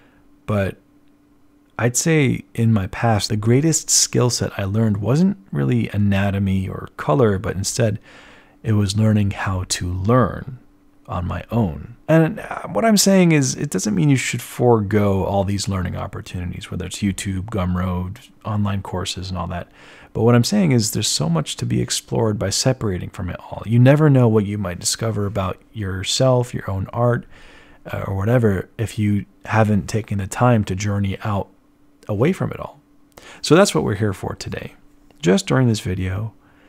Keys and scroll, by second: 1.5 z, 5.5 b.